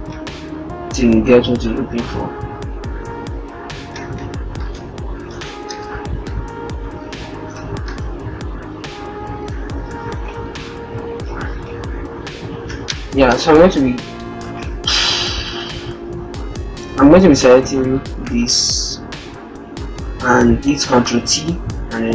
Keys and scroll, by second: 10.6 ctrl+-, 11.3 ctrl+-, 15.1 ctrl+0, 18.1 ctrl+a, 18.4 ctrl+t.